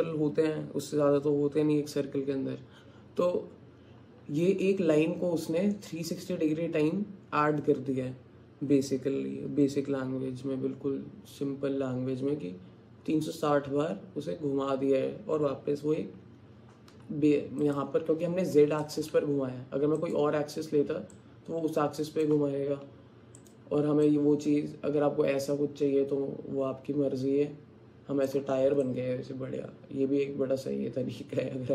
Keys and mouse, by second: 16.9 Tab, 20.0 click, 21.1 middle click, 21.2-22.3 alt+drag, 23.4 click, 24.1-27.9 middle drag, 27.9 alt+click, 28.9-31.7 alt+drag.